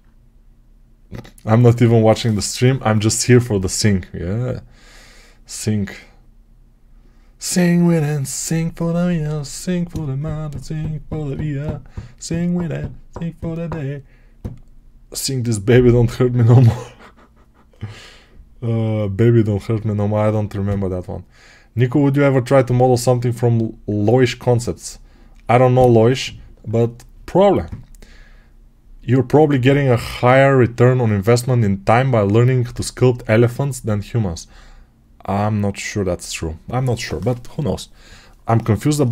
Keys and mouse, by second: 1.7-39.1 drag.